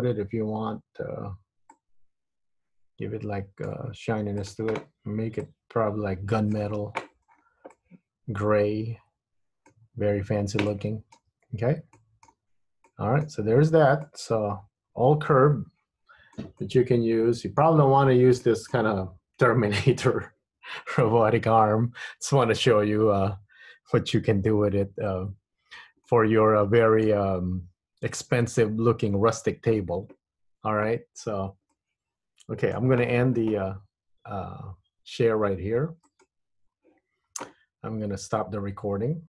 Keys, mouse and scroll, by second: 1.8 click, 4.6 click, 7.4-7.9 scroll down 5, 7.9 middle click, 10.1-10.9 scroll up 2, 10.9 middle click, 11.5 Tab, 12.1 middle click, 12.6 Tab, 13.0 middle click, 13.6 Tab, 13.9 Tab, 14.1 middle click, 16.7 middle click, 18.6 middle click, 26.2 middle click, 31.9 middle click.